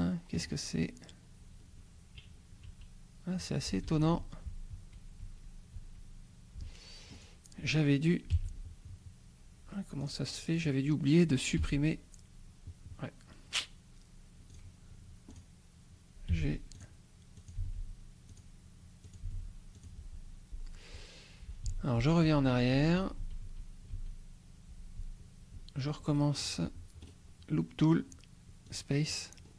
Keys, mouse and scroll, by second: 0.7-1.4 shift+scroll up 4, 2.7 a, 3.9 ctrl+z, 7.2 click, 8.3 g, 10.0 click, 10.7 click, 11.6 g, 14.5 click, 15.4 click, 16.3 g, 16.8 click, 17.4 click, 17.6 g, 18.3 click, 19.2 click, 19.2 g, 19.8 click, 21.7 ctrl+z, 25.0 ctrl+z, 25.9-26.5 ctrl+scroll down 2, 27.0 right click, 28.8 click, 29.4-29.5 scroll up 2.